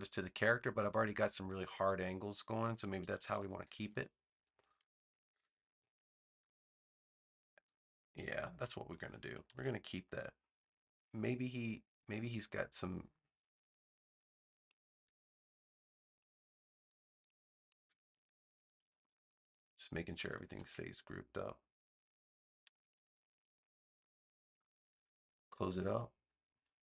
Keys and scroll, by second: 2.9 super+=, 9.4 super+z, 18.7 super+g, 20.5 super+d, 22.8 super+s.